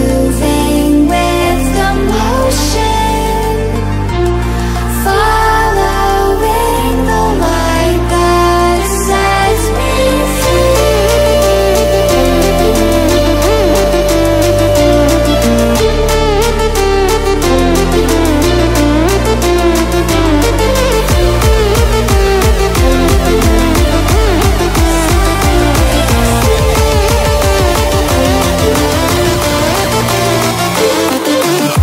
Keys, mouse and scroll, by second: 1.7 click, 4.6 click, 7.9 click.